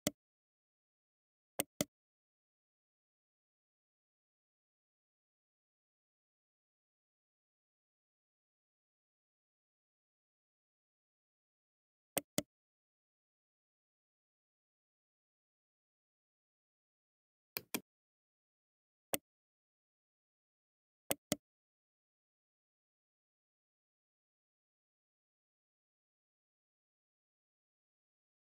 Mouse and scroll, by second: 1.3 right click, 17.2 click, 19.0 right click, 20.8 right click.